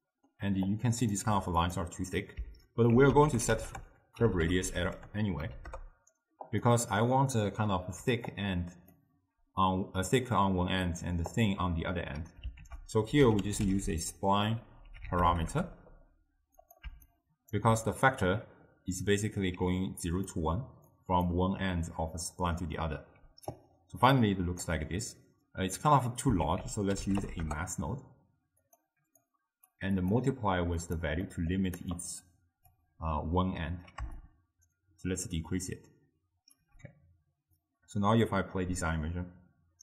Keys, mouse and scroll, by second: 0.1-0.8 middle drag, 0.8-1.3 drag, 1.3 g, 3.0 ctrl+a, 8.1 d, 8.4-9.0 drag, 9.0-9.3 d, 10.5 d, 11.1 d, 11.5 click, 11.8 d, 11.9 click, 12.0 d, 12.7 ctrl+a, 17.2-19.6 alt+right drag, 19.6 d, 19.9 click, 20.4-20.9 d, 21.0 click, 21.3-21.8 d, 23.3 d, 23.6-24.8 right drag, 24.8 d, 25.5 d, 26.5 ctrl+a, 29.3-31.3 drag, 31.3-32.0 middle drag, 32.0 click, 34.3-37.3 shift+drag, 37.7-39.8 drag.